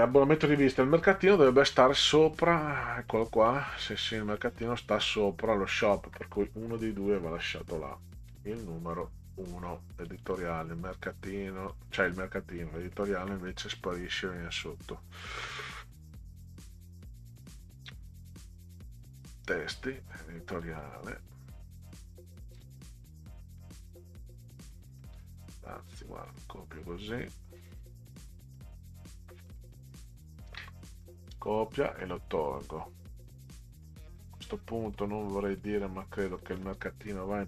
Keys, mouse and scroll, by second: 0.5 click, 1.6 scroll up 2, 2.2-2.9 scroll up 4, 3.5 middle click, 4.4 middle click, 6.9 scroll up 2, 8.3 click, 10.0 click, 10.3 click, 11.7 click, 12.8 click, 17.1 click, 18.5 click, 19.6 click, 20.5 click, 20.7 click, 22.4-24.7 drag, 26.3-28.5 drag, 30.4 ctrl+c, 31.9 Delete, 34.4 click, 35.5 click, 36.3 click.